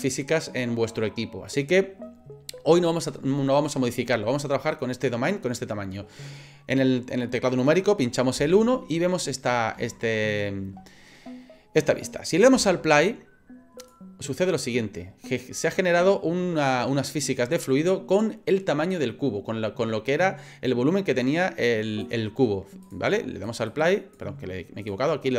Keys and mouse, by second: 1.5 click, 8.4 KP_1, 9.9 shift+middle click, 13.8 click, 22.1 click, 22.9 click, 23.5 click, 23.7 click, 24.8 click.